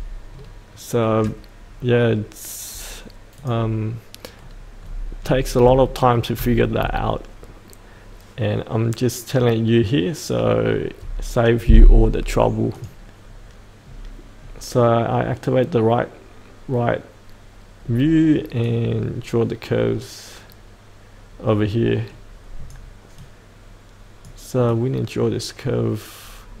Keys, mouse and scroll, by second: 0.3-3.3 scroll down 1, 3.3 click, 4.4-5.2 scroll down 1, 5.8 shift+middle click, 12.7 click, 13.8-17.9 scroll up 1, 17.9-18.6 scroll down 1, 18.6-26.6 drag.